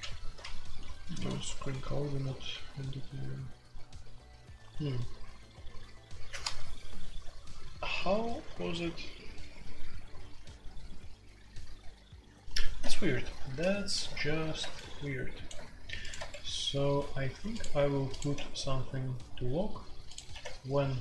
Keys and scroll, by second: 0.0-3.1 typing, 1.4 Escape, 16.1 Escape, 18.3 q, 20.3 typing.